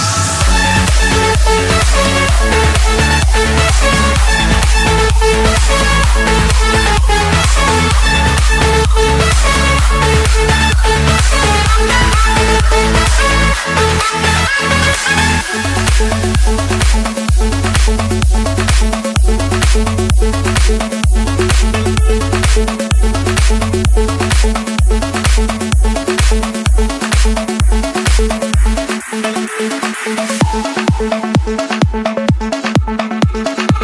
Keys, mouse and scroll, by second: 0.1 typing, 0.2 Escape, 0.9 middle click, 1.1 middle click, 2.0 middle click, 4.1 Return, 7.5 click, 8.2 click, 10.6-15.0 typing, 17.2 Return, 18.2 Escape, 19.1 Return, 20.9 click, 24.4-26.3 typing, 27.5 Return, 28.9 Escape, 30.2 middle click, 31.1 middle click, 33.3 a.